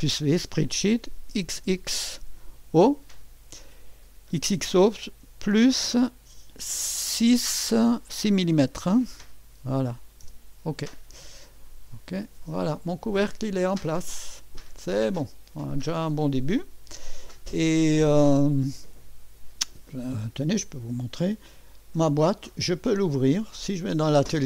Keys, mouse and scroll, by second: 1.4 typing, 2.6 click, 5.4-10.8 typing, 12.2 click, 20.7-22.1 typing, 22.9 click, 23.3-24.0 typing.